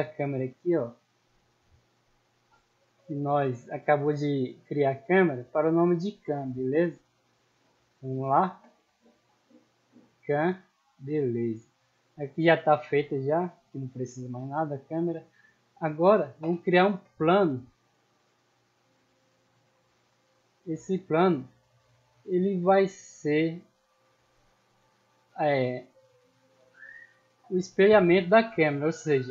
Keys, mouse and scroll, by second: 0.1 middle click, 1.1 scroll up 2, 2.7 click, 4.0 click, 5.8 click, 6.8 click, 7.7 click, 8.3 c, 9.7 click, 11.0 n, 11.5-14.1 middle drag, 14.6 scroll down 1, 14.9-15.3 scroll up 2, 16.6-17.2 scroll down 2, 17.5 scroll up 2, 18.5 scroll down 2, 19.0 scroll down 2, 19.4-19.7 scroll up 2, 19.8 shift+a, 21.2 click, 22.3-23.5 drag, 25.1 scroll up 2, 25.6-25.9 middle drag, 26.2 shift+middle drag, 26.7 middle click, 27.5 middle click.